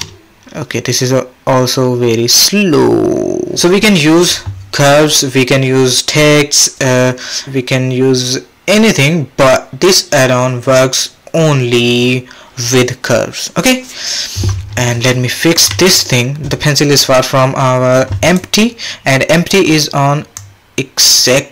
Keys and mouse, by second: 3.9 shift+Left, 15.4 middle click, 15.7 middle click, 18.2 click, 20.4-21.5 drag.